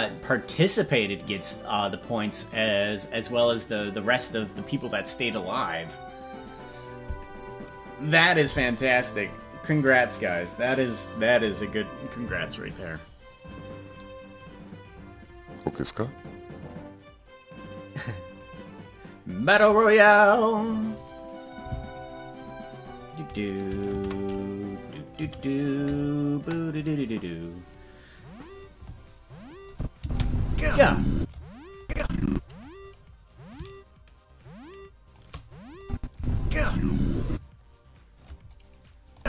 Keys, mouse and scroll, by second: 29.7 click, 30.0 space, 31.1 space, 31.8 click, 33.5-35.2 drag, 35.8 click, 36.1 space, 37.3 space, 39.1 click.